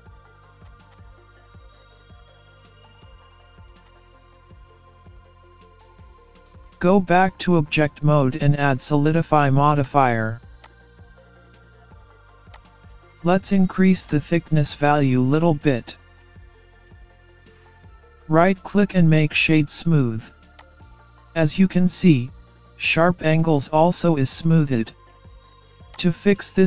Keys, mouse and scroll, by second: 3.3 Delete, 4.0-4.5 scroll down 2, 4.2-4.6 scroll up 2, 4.5 middle click, 4.9 scroll down 3, 5.0 scroll up 2, 5.2 middle click, 6.4 Tab, 7.2-7.6 scroll up 1, 7.6 middle click, 9.8 click, 10.7 click, 14.1 click, 16.0-16.3 scroll up 1, 16.3 middle click, 17.7 scroll up 1, 17.9-19.2 scroll down 3, 18.4-19.2 scroll up 1, 19.3 right click, 21.7 middle click, 26.0 click.